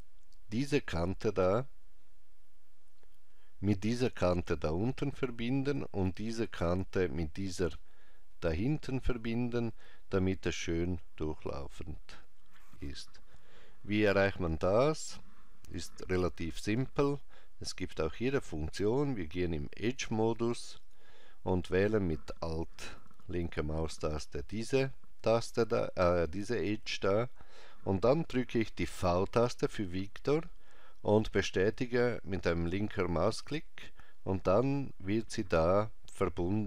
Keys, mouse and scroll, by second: 16.7 ctrl+Tab, 20.8 click, 22.9 alt+click, 28.9 v, 33.4 click.